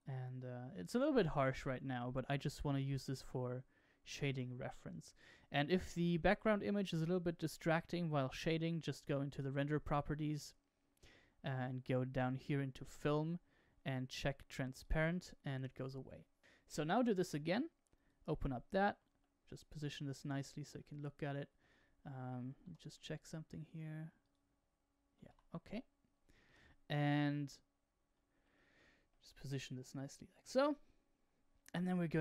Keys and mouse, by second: 3.2-3.9 shift+middle drag, 9.2 click, 12.9 click, 14.7 click, 17.1 click, 19.5-20.6 shift+middle drag, 20.7 shift+middle click, 22.5 n, 24.1 click, 25.2 Escape, 26.4 n, 28.5-29.1 middle drag, 29.2-32.2 shift+middle drag.